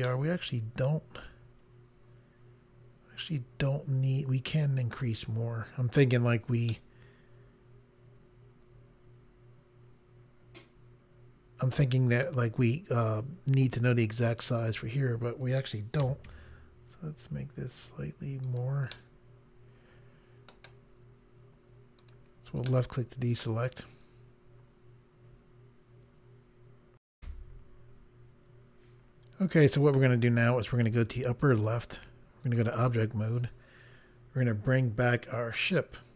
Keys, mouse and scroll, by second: 0.2 middle click, 6.8 middle click, 16.1 typing, 18.5 click, 19.0 middle click, 22.1 click, 22.8 middle click, 27.1 Pause, 31.8 click, 32.4 click, 35.5 click.